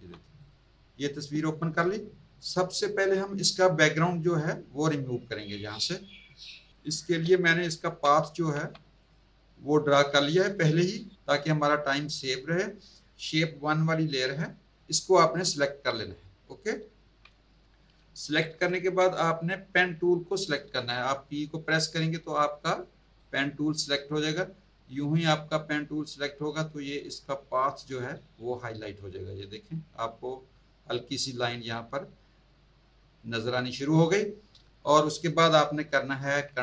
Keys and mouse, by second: 0.4 click, 6.7 click, 7.8 v, 8.5 z, 9.0 click, 15.3 click, 23.2 p.